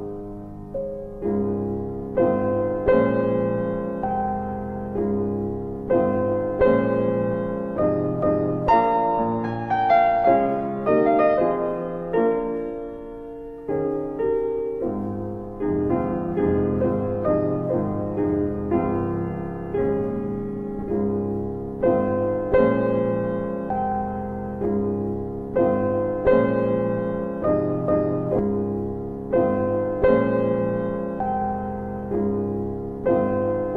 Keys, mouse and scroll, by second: 1.3 alt+w, 2.2 alt+middle click, 3.4 click, 3.9 ctrl+alt+middle click, 4.6 click, 7.3 ctrl+click, 9.3 alt+i, 12.0 click, 13.9 right click, 16.6 click, 17.2 double click, 17.4 click, 17.6 double click, 18.2 click, 18.4 double click, 19.2 click, 32.6 ctrl+alt+e, 33.5 ctrl+alt+e.